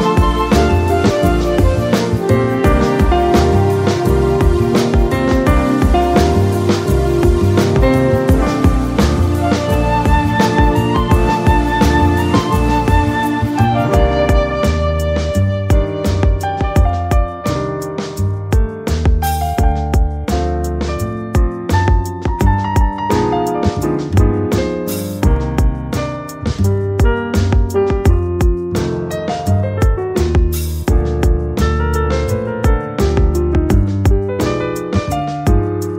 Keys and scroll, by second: 5.2 space, 20.1 space, 23.7 space, 25.9 space, 29.4 space, 33.7 space.